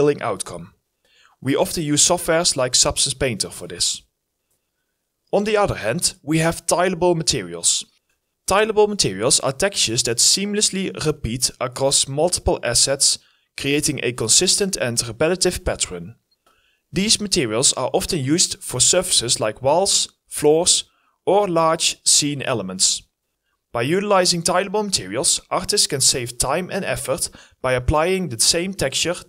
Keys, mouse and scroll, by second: 2.0 alt+right click, 2.2 alt+middle click, 2.3 alt+click, 2.8 alt+right click, 3.0 alt+click, 3.2 alt+right click, 3.6 alt+middle click, 4.3 alt+middle click, 4.4 alt+right click, 4.5 alt+middle click, 4.6 alt+click, 8.6 scroll up 1, 8.9 double click, 10.1-10.7 scroll down 1, 16.6 scroll up 1, 16.7 middle click, 21.5 double click, 24.1 Delete, 25.6 Delete.